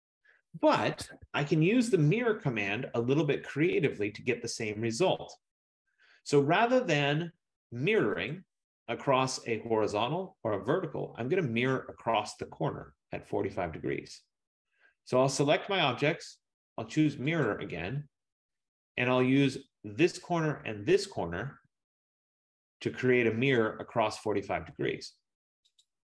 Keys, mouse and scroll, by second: 1.3 Escape, 6.8 click, 8.5 click, 9.9 F15, 17.6 click, 20.3 click, 25.9 click.